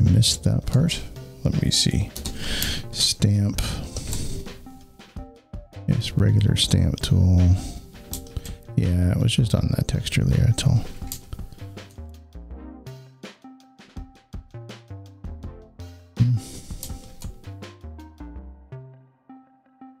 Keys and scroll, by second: 2.0 s, 11.0 alt+z, 12.0 space.